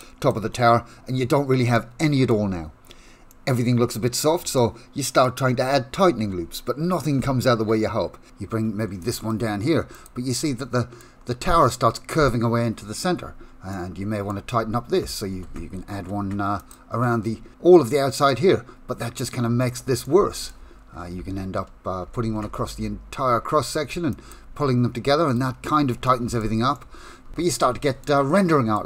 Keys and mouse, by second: 0.4 Tab, 1.8 shift+middle click, 3.3 middle click, 4.5 shift+middle click, 6.2 2, 8.8 ctrl+r, 10.4 middle click, 13.7 middle click, 16.0 ctrl+r, 20.0 middle click, 23.9 ctrl+r, 26.0 shift+middle click, 26.6 middle click, 27.3 Tab, 27.5 middle click, 28.2 shift+middle click.